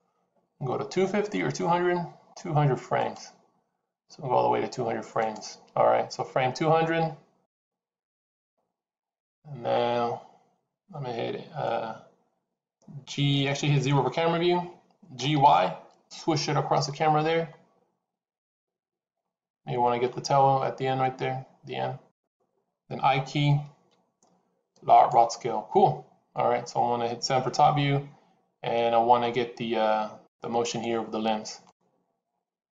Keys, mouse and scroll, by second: 7.7 click, 15.1 g, 27.3 KP_7, 30.5 click.